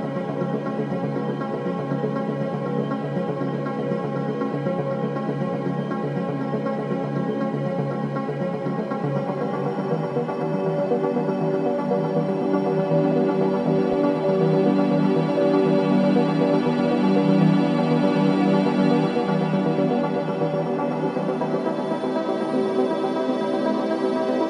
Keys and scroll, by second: 0.0 ctrl+d, 0.2 Escape, 3.7 ctrl+z, 4.2 ], 5.1 ], 10.2 ], 14.9 ], 18.5 4, 19.2 3, 23.9 Delete.